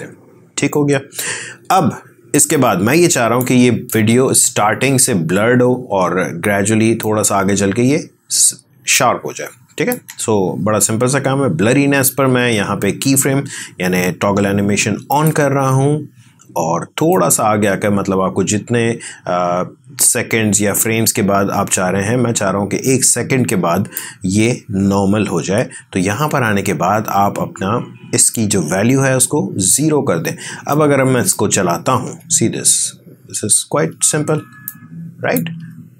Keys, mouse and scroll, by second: 0.7 click, 2.7-5.7 drag, 6.9-10.8 drag.